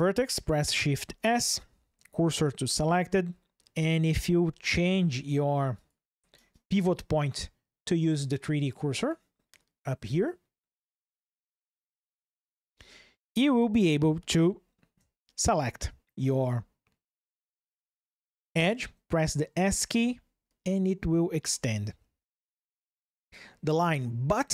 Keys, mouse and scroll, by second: 0.8 shift+s, 3.0 ctrl+shift+2, 5.5-12.1 drag, 12.3 ctrl+shift+\, 14.1 shift+click, 19.7 s.